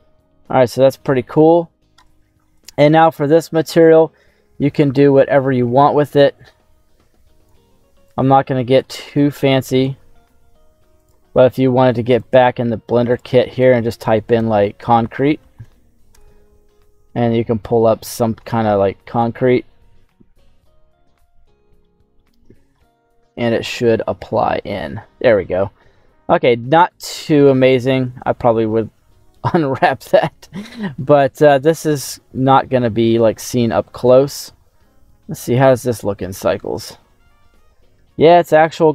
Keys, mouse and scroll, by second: 0.1-0.5 scroll up 2, 0.5-1.1 scroll down 2, 1.3 scroll down 2, 2.0 shift+middle click, 3.6 click, 12.0 click, 13.0-16.6 drag, 17.7 click, 20.0-20.6 scroll up 2, 21.2 shift+middle click, 21.7 middle click, 22.3 scroll up 2, 22.7-24.3 middle drag, 24.6-27.1 middle drag, 27.5 right click, 30.6 middle click, 31.1 scroll down 2, 31.3-32.5 middle drag, 32.7-33.0 scroll down 2, 33.0 shift+middle click, 33.9 middle click, 34.5-35.9 scroll up 2, 35.9 click, 36.7 shift+middle click, 37.2-37.9 scroll up 3, 38.5 scroll down 1.